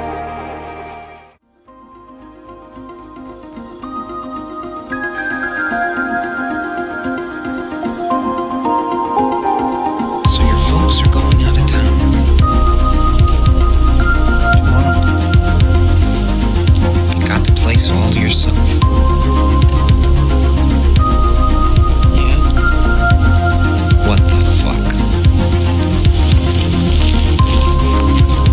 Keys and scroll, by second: 1.1 space, 2.7 space, 3.2 space, 12.9 ctrl+z, 15.5 space, 23.3 space, 24.5 space.